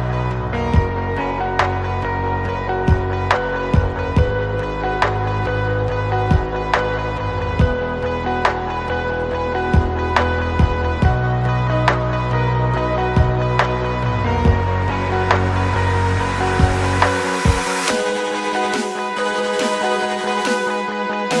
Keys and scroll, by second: 3.9 Escape, 4.6 ctrl+s, 8.0 p, 10.9-11.8 typing, 12.3 Right, 13.1 Up, 13.5 r, 14.8 d, 15.1 Right, 15.9-18.0 typing, 18.0 Escape.